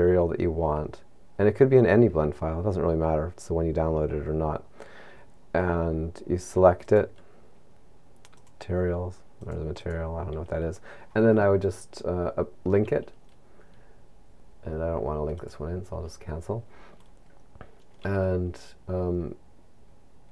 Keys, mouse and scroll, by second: 15.6 click.